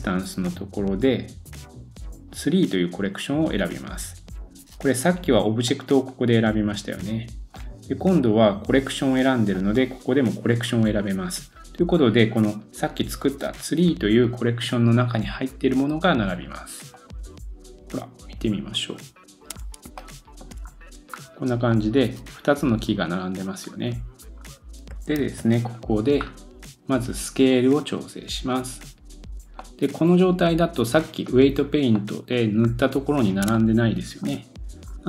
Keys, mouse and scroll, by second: 5.8 middle click, 6.1-19.7 drag, 17.9 scroll up 2, 18.5 scroll down 1, 19.6 scroll up 2, 20.0 shift+middle click, 20.5-21.7 scroll up 3, 21.7 scroll up 2, 21.7 middle click, 22.1 click, 22.9 middle click, 23.0-24.9 drag, 23.4-24.5 scroll down 5, 24.6 shift+middle click, 25.3 super+s, 25.9 scroll up 1, 26.2 scroll down 2, 27.5 click, 28.3-34.3 drag, 29.6 middle click, 31.3 scroll up 1, 31.6-32.1 scroll down 3, 31.9 middle click, 32.6-33.0 scroll up 1, 33.0-33.5 scroll down 1, 33.6 shift+middle click, 34.8-35.0 scroll down 6.